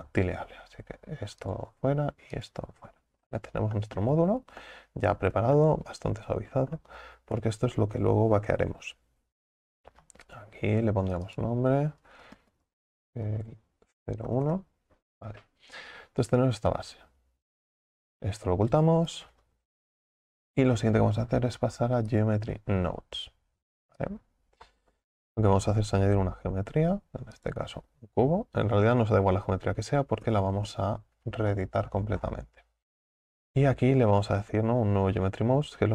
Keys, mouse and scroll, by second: 1.4 click, 3.3-3.8 scroll up 6, 3.8 shift+middle click, 4.6 Tab, 4.7 middle click, 5.3 Tab, 5.7-7.4 middle drag, 7.4 KP_7, 11.1 click, 11.3-14.4 drag, 17.8 click, 22.2 click, 24.1-26.4 drag, 26.4-33.5 middle drag, 33.5-34.9 scroll up 5.